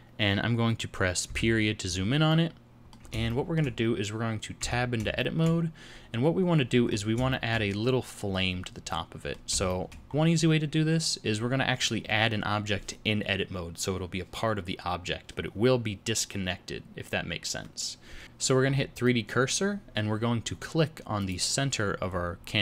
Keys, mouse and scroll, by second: 1.3 KP_Decimal, 2.3 middle click, 3.3 shift+middle click, 4.6 Tab, 5.2 shift+middle click, 6.9-7.3 scroll up 2, 7.3 shift+middle click, 8.9 middle click, 9.7 shift+middle click, 10.1 scroll up 2, 11.7 scroll down 4, 18.2 middle click, 18.2-18.6 scroll down 5, 18.6-19.0 scroll up 4, 19.0 middle click, 21.2 click, 22.1-22.4 scroll down 4, 22.4 middle click.